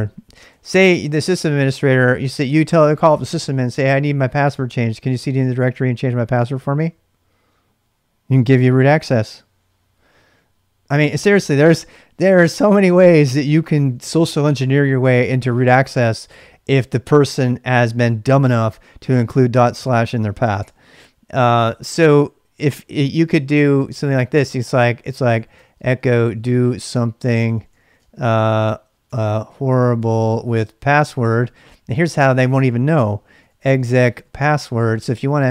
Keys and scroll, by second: 0.0-2.6 typing, 0.9 Return, 20.6 Return, 21.5 ctrl+[, 21.6 typing, 23.5-35.5 typing.